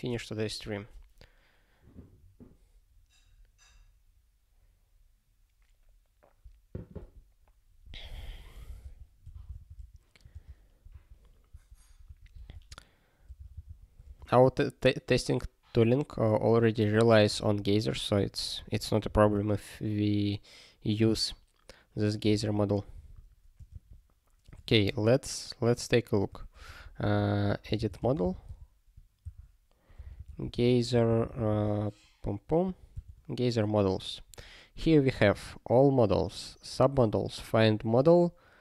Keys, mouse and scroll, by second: 10.9 super+o, 12.1 super+o, 14.1 ctrl+g, 19.1 super+o, 22.9 super+o, 26.7 super+o, 27.1 alt+x, 35.8 click, 36.7 click.